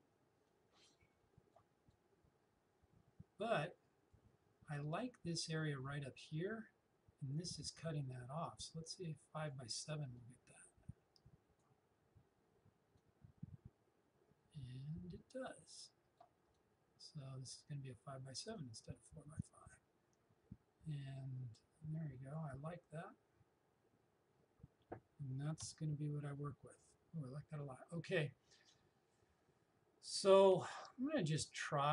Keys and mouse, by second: 7.9-25.0 drag, 25.7 Return, 31.3 click.